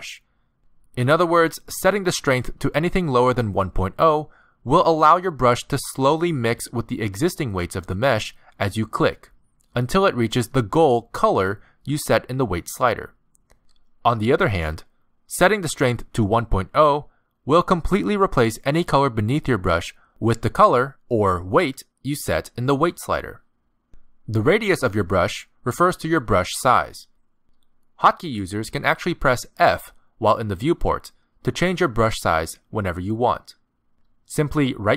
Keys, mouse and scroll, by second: 1.2 click, 9.9 click, 10.5 click, 10.9 click, 11.4 click, 14.4 click, 16.9 click, 18.9 ctrl+z, 19.9 click, 21.6 click, 23.0 ctrl+z, 25.1 click, 27.1 click, 30.0 f, 31.5 f, 32.4 f, 33.9 f, 34.6 f.